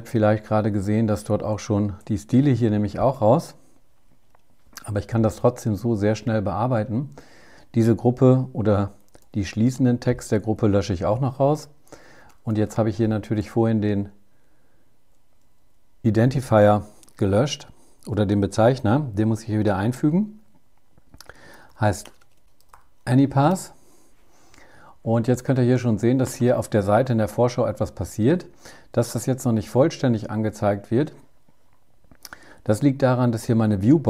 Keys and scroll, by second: 1.0 shift+super+Right, 8.2 super+Left, 10.0 Delete.